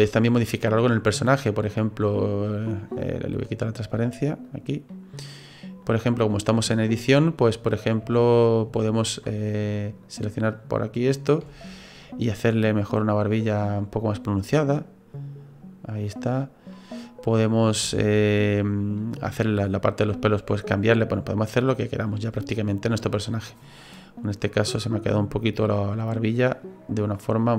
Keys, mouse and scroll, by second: 0.0-0.3 scroll up 3, 1.2 right click, 2.2 click, 4.5 click, 4.9 middle click, 5.8 right click, 6.5 right click, 7.1-7.8 scroll up 3, 7.8 scroll down 2, 10.0 click, 10.3 click, 11.1 right click, 11.7 shift+right click, 12.0 middle click, 13.6 click, 14.5 click, 16.7 click, 16.7 middle click, 17.5 scroll down 2, 17.8 shift+middle click, 18.3 right click, 19.0 middle click, 19.6 right click, 21.7 click, 22.1 middle click, 24.2 right click, 24.6 right click, 26.5 click.